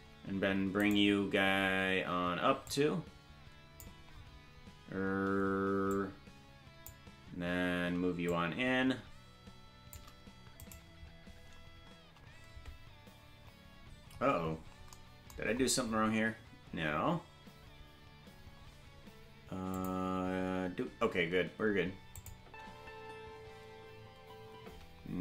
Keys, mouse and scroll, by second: 0.9 right click, 2.6-3.8 drag, 5.9-6.9 drag, 8.2-9.9 shift+drag, 10.7 right click, 14.1-14.9 scroll up 1, 14.9-15.5 scroll up 9, 15.5-18.3 scroll up 2, 18.3-19.5 scroll down 1, 19.5 scroll down 2, 19.7 click, 22.2 click, 22.4 space.